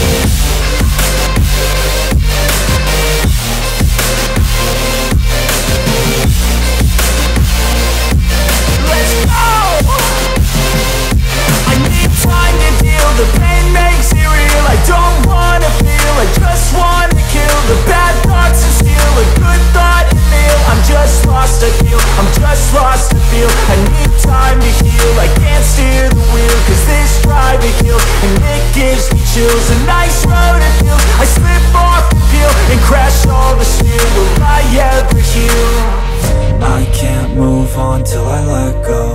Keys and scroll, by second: 8.7 space, 14.0 space, 22.8 shift+Page_Up, 28.0 space, 29.1 ctrl+z, 29.8 shift+Page_Up, 32.1 shift+Page_Down.